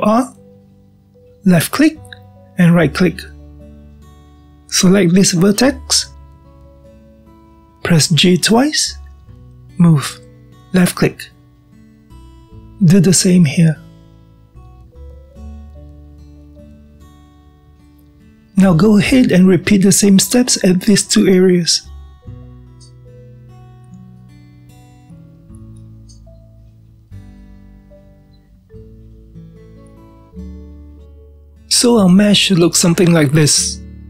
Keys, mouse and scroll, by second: 1.1 ctrl+r, 4.2 click, 8.1 g, 12.2 click, 14.5 g, 16.4-16.9 scroll down 2, 16.9-19.1 shift+middle drag, 19.1 click, 19.6-21.5 middle drag, 21.5 click, 22.1-23.1 middle drag, 23.1-24.9 drag, 24.9-26.0 middle drag, 26.0-28.5 drag, 28.5-31.0 middle drag.